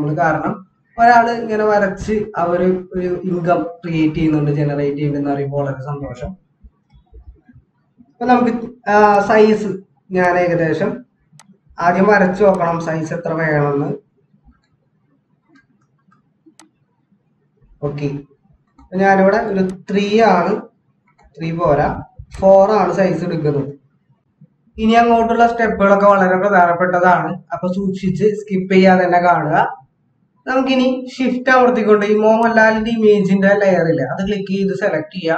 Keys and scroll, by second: 11.9 ctrl+=, 12.0 ctrl+=, 14.5 ctrl+z, 15.4-16.0 typing, 19.3 typing, 21.0-22.3 typing.